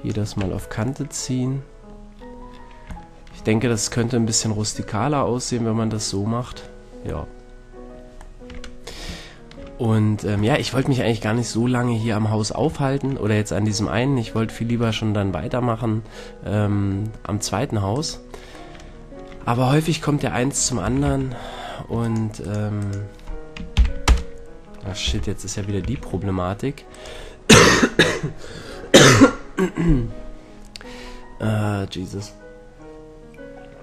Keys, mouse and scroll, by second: 0.4 Tab, 1.8-17.9 middle drag, 17.9 right click, 18.7-19.4 middle drag, 19.9-20.8 middle drag, 20.8 a, 21.1 a, 22.0 right click, 23.7 ctrl+p, 25.1 ctrl+z, 25.8 a.